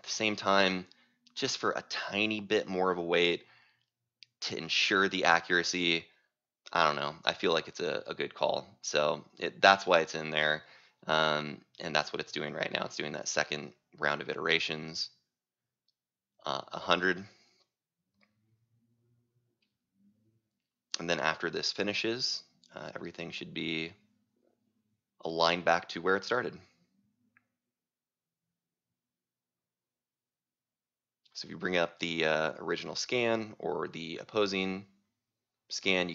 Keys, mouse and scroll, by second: 31.8-36.1 drag.